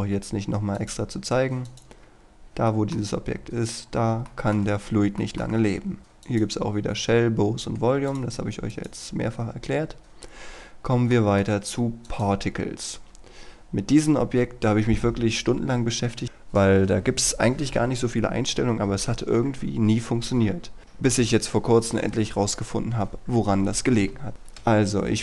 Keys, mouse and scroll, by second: 0.8 click, 2.4-2.8 scroll down 1, 2.8 middle click, 3.9 scroll up 1, 4.4 shift+middle click, 4.9 scroll down 1, 6.0 click, 11.2 shift+middle click, 12.1 click.